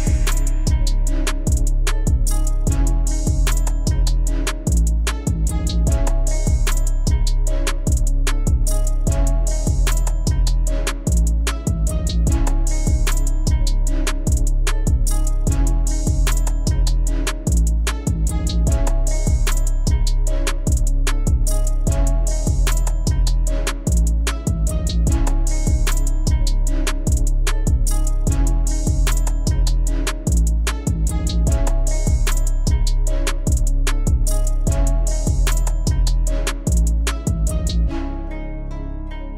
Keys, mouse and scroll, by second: 0.6 s, 1.1-1.8 middle drag, 1.8 KP_1, 2.3-3.0 middle drag, 3.0 s, 4.3 KP_1, 4.9 KP_7, 5.3 scroll up 2, 5.6 shift+middle click, 6.1 Tab, 6.3 middle click, 6.6 scroll down 3, 6.8 middle click, 7.5 scroll up 2, 8.1 middle click, 8.6 2, 8.9 click, 9.1 middle click, 9.7 shift+click, 10.0 middle click, 10.6 scroll up 3, 10.9 shift+middle click, 11.3 click, 11.6 middle click, 12.3 KP_Divide, 12.7 middle click, 13.5 KP_Divide, 13.9 scroll up 2, 14.1 middle click, 15.0 shift+click, 15.2 middle click, 16.0 shift+click, 16.0 scroll down 1, 16.1 middle click, 16.7 shift+click, 17.2 shift+click, 17.5 shift+click, 18.1 KP_7, 18.8 ctrl+b, 21.6 Tab, 22.3 ctrl+2, 22.9 Tab, 23.4 ctrl+r, 24.9 ctrl+r, 27.7 ctrl+z, 28.4-29.1 middle drag, 29.1 Tab, 29.5 KP_1, 30.0-30.9 scroll up 1, 30.9 ctrl+r, 32.4 s, 35.6 middle click, 36.4 Tab, 36.6-37.7 right drag, 37.7 scroll down 1, 37.8-38.8 middle drag, 38.8-39.3 drag.